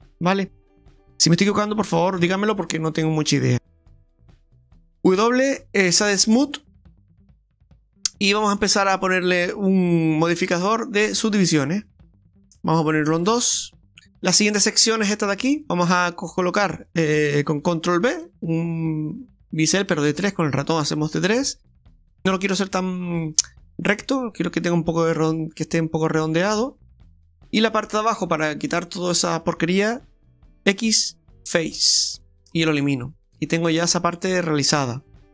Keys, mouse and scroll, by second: 0.0 scroll down 2, 0.2 middle click, 0.8 scroll up 3, 1.0 ctrl+z, 1.0 ctrl+`, 1.0 shift+middle click, 1.0 scroll down 7, 1.2 middle click, 2.2 Tab, 5.1 w, 6.9-7.5 scroll down 3, 8.6 click, 9.3 click, 13.3 click, 13.9 Tab, 13.9 middle click, 13.9 scroll up 1, 14.0 click, 15.2 right click, 15.5 alt+shift+right click, 15.7 right click, 18.3 ctrl+b, 22.2 middle click, 22.9 middle click, 23.0-23.4 scroll up 3, 23.8 middle click, 24.8 scroll down 1, 26.2 Tab, 26.6 scroll down 2, 27.2 Tab, 27.6 middle click, 29.2 click, 29.2 right click, 30.7 x, 32.5 scroll down 2, 32.8 middle click, 34.8 Tab.